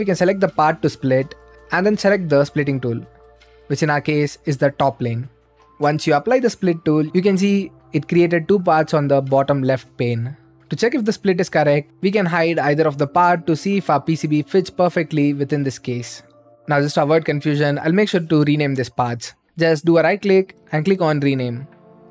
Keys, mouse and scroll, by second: 0.0 click, 1.3 click, 4.1-6.3 drag, 7.1 click, 8.3-11.9 right drag, 12.7-13.9 drag, 13.9-15.2 right drag, 15.2 middle click, 15.9-18.8 right drag, 18.8 click, 19.1-20.2 right drag, 21.5 click, 22.0-22.1 typing.